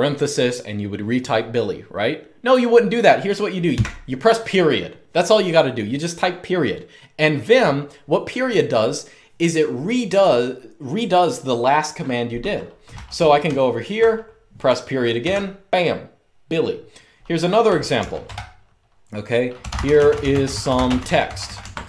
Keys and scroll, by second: 3.4 ., 12.6-14.9 typing, 17.4-18.0 typing, 19.1-21.8 typing.